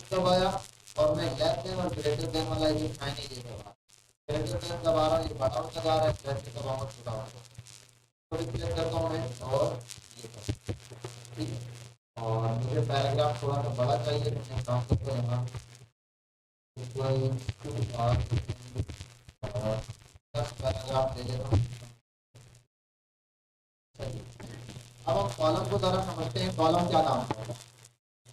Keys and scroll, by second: 1.9 ctrl+shift+., 15.0 BackSpace, 17.5-18.5 typing.